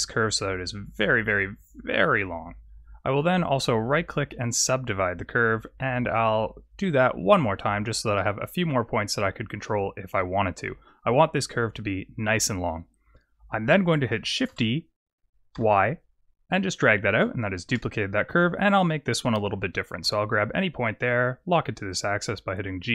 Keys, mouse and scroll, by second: 2.4-3.7 scroll down 1, 3.7 right click, 3.7-4.4 scroll down 2, 8.1 middle click, 9.1 Tab, 9.5 middle click, 14.4 shift+d, 17.0 Tab, 18.6 click, 19.9 g.